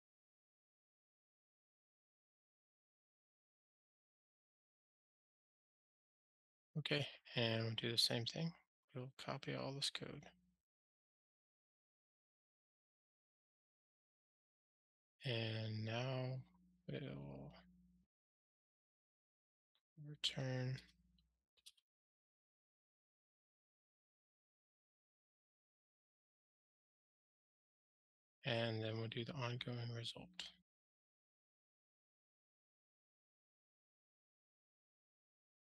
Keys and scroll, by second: 3.7 Return, 4.3 alt+Return, 5.4 alt+super+l, 12.1 super+c, 13.7 super+v, 22.9 Return, 24.5 ctrl+alt+shift+r, 34.1 Tab, 34.8 Return, 35.5 alt+Return.